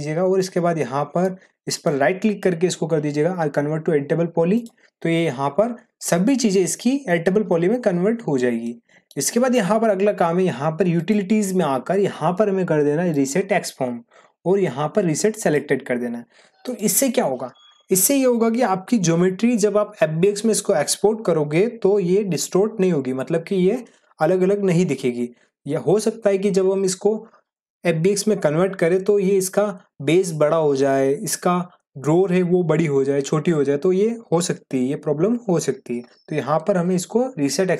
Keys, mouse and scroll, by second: 1.7 right click, 5.5 click, 8.6 click, 8.9 middle click, 10.9 click, 10.9 click, 15.9 click.